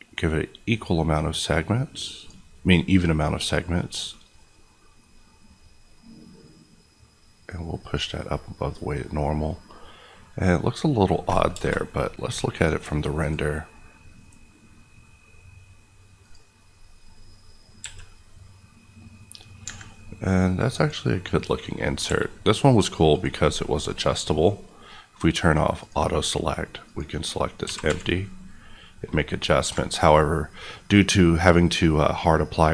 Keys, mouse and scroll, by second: 2.1 click, 8.6 middle click, 8.9-9.7 scroll up 1, 9.7-11.1 middle drag, 11.5 KP_0, 13.2 click, 19.6 Escape, 20.7 click, 26.7 click, 27.6 g, 27.8 y, 29.6 Escape.